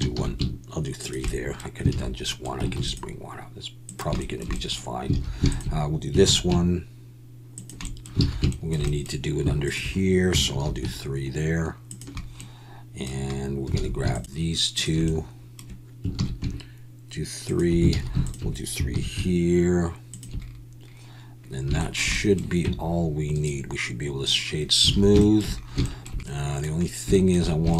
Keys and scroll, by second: 0.1 ctrl+b, 0.2 ctrl+b, 1.9 alt+a, 2.0 alt+a, 2.7 ctrl+r, 5.1 alt+a, 6.2 ctrl+b, 8.2 alt+a, 10.5 ctrl+b, 13.8 alt+a, 16.2 ctrl+b, 17.9 alt+a, 18.9 ctrl+b, 19.0 ctrl+b, 22.6 Tab, 24.9 alt+a.